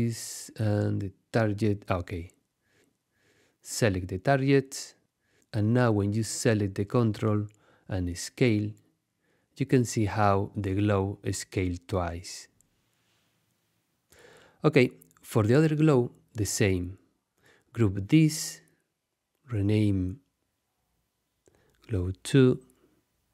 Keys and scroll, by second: 13.8 shift+super+z, 17.8 super+g, 20.0-23.0 typing, 23.2 Return.